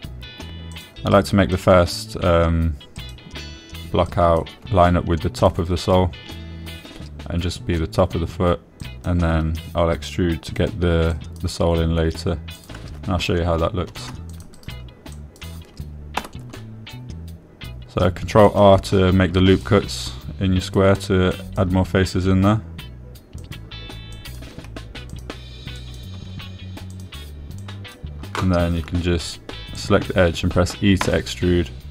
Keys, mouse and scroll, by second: 0.6 click, 0.9 g, 2.1 click, 2.7 click, 4.4 click, 5.5 click, 6.8 click, 6.8 g, 10.2 click, 10.7 g, 11.8 click, 12.5 click, 13.9 click, 15.3 ctrl+r, 15.9 click, 16.6 click, 17.6 g, 19.8 click, 20.8 click, 21.3 g, 22.0 click, 22.7 click, 24.8 click, 25.6 click, 26.5 click, 26.5 g, 27.2 click, 28.3 click, 29.0 click, 31.1 click.